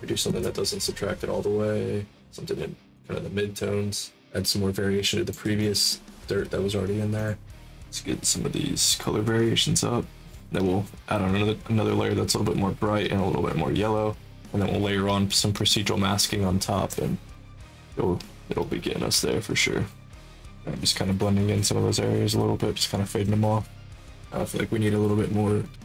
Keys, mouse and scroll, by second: 4.2 click, 5.5 alt+click, 7.1 click, 7.6-9.0 drag, 9.1 click, 9.3 click, 9.7 click, 10.6 click, 11.1 click, 11.4 click, 12.2 click, 13.1 click, 14.1 click, 14.3 click, 15.1 click, 15.6-16.7 drag, 17.3 click, 18.2 click, 18.3 click, 18.6 click, 19.2 click, 19.3 click, 19.8 alt+click, 20.3-21.4 drag, 21.5 click, 21.7 click, 22.1 click, 22.7 click, 23.0 click, 23.3 click, 23.6 click.